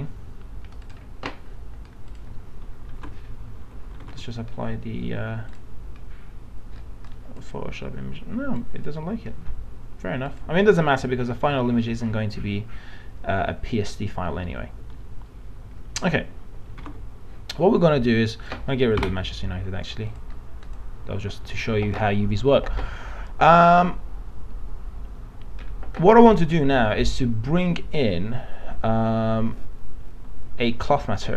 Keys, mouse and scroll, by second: 4.1 alt+Tab, 5.6-11.3 drag, 11.6 middle click, 12.0-14.9 alt+middle drag, 16.0 alt+Tab, 16.9 alt+Tab, 18.5 click, 19.0 Delete.